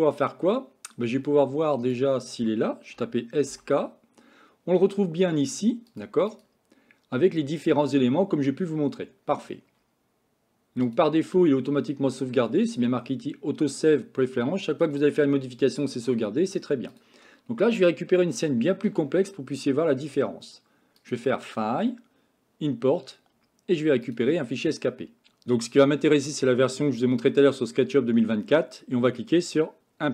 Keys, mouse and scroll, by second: 21.0-24.3 drag.